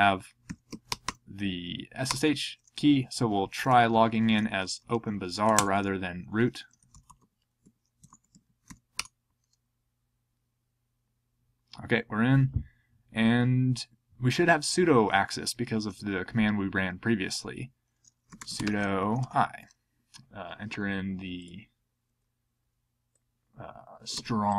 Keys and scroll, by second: 0.2-1.5 typing, 2.1 Return, 3.6 ctrl+p, 4.2 ctrl+a, 4.6 alt+f, 5.5 alt+BackSpace, 6.0-8.1 typing, 18.0-19.5 typing, 24.1 super+c.